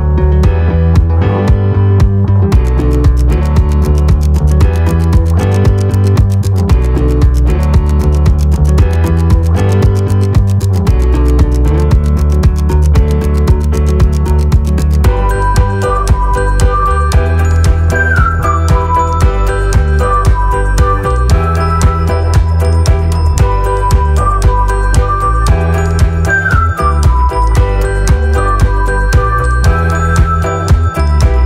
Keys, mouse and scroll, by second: 23.8 Num_Lock, 23.8 click, 24.4-24.7 scroll down 1, 25.3-25.8 scroll, 25.6-26.7 typing, 27.8 click, 29.2 click, 31.0 Num_Lock, 31.0 space, 31.2 space.